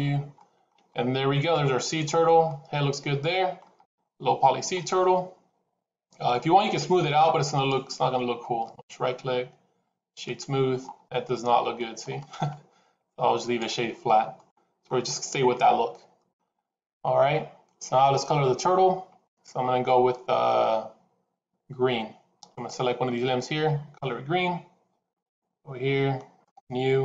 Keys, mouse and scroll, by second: 0.2 shift+middle click, 0.7 middle click, 2.4 middle click, 3.6 scroll up 2, 4.1 shift+middle click, 4.2 shift+middle click, 4.9 middle click, 7.4 click, 8.5 right click, 10.7 scroll up 3, 11.0 middle click, 12.1 right click, 13.9 scroll down 3, 14.2 middle click, 22.4 click, 25.0 click.